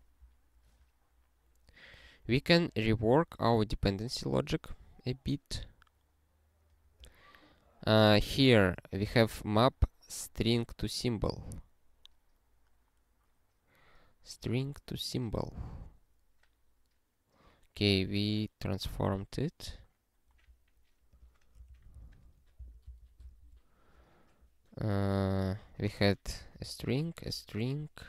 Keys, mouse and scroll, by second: 3.2 click, 3.7 scroll up 1, 4.9 scroll down 1, 6.7-8.1 scroll down 1, 8.1 click, 21.1 click, 21.7 ctrl+n, 21.9 ctrl+b, 22.6 ctrl+b, 22.8 ctrl+b, 23.2 ctrl+e.